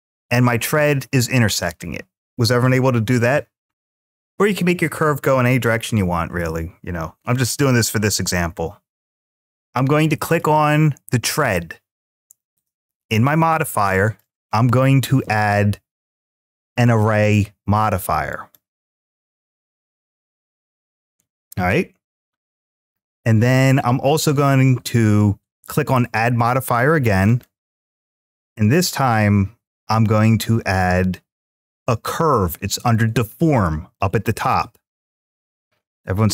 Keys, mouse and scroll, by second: 9.2 middle click, 10.1 click, 13.8-18.3 drag, 27.0-36.3 drag.